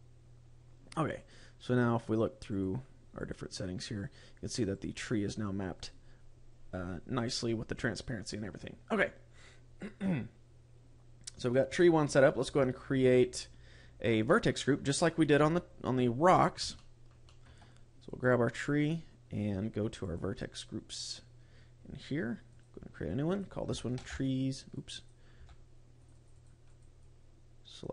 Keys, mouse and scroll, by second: 1.1 click, 2.4 click, 3.1 click, 4.6 click, 8.1-10.0 scroll up 4, 10.0 scroll up 1, 14.1 middle click, 15.3 KP_7, 16.0-16.6 scroll down 7, 16.6 shift+middle click, 17.2 shift+middle click, 17.4-18.0 scroll up 4, 18.0 right click, 19.9 click, 22.4 click, 23.1 click, 26.0 click.